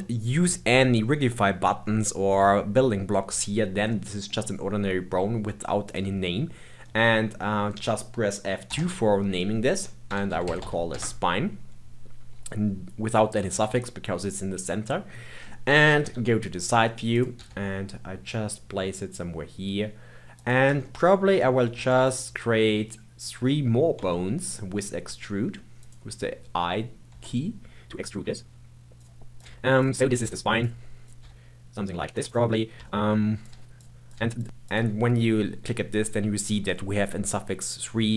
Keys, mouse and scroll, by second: 1.8-2.6 scroll down 3, 2.6-3.9 scroll down 1, 3.9-5.8 middle drag, 5.8 click, 7.4-8.6 middle drag, 8.6 F2, 14.8-16.0 middle drag, 16.0 KP_3, 17.1 click, 17.3 g, 20.8-21.7 shift+middle drag, 21.7 e, 23.9 e, 27.1 e, 29.3 click, 29.4 g, 30.1 click, 30.2 g, 31.0 click, 31.2 g, 32.8 shift+middle click, 33.4 click, 33.5 g, 34.0 click, 34.1 g, 34.6 click.